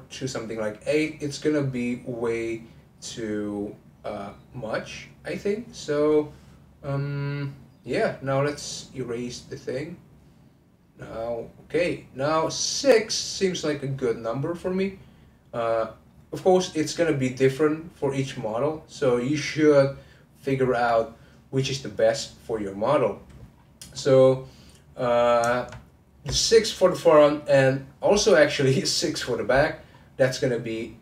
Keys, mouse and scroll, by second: 23.5-23.9 scroll down 1, 23.9-25.9 middle drag, 25.9-27.8 scroll up 2, 27.8-29.9 scroll up 1, 29.9-31.0 scroll down 1.